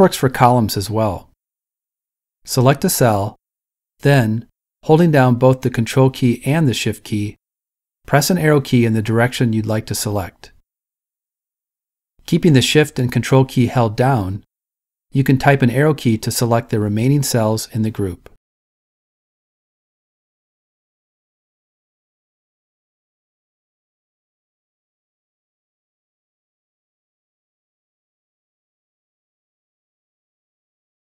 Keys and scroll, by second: 7.9 Up, 7.9 Down, 14.3 Right, 14.3 Left, 27.7 Down.